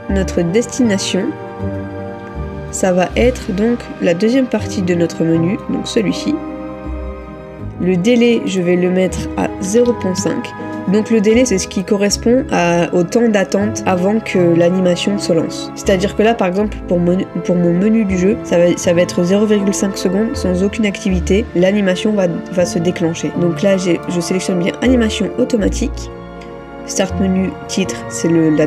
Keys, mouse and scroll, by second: 9.7 typing.